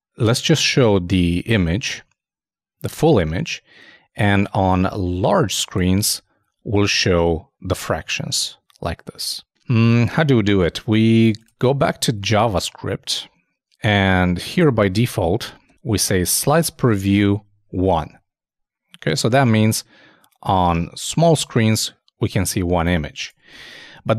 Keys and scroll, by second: 9.4 super+Tab, 16.1 super+s, 17.0 super+Tab, 23.5 super+Tab.